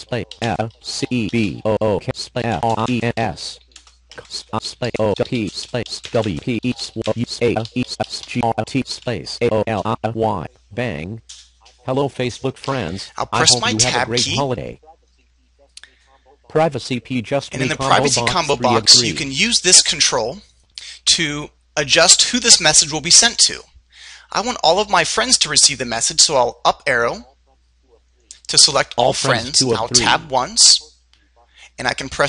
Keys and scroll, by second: 13.9 Tab, 26.4 Up, 30.4 Tab.